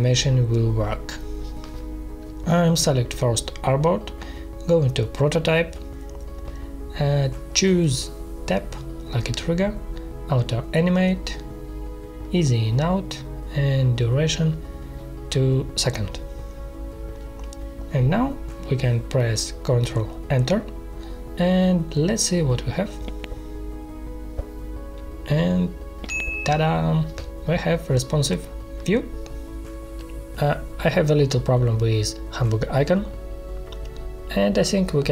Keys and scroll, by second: 13.8 2, 14.2 Return, 22.3 ctrl+Return.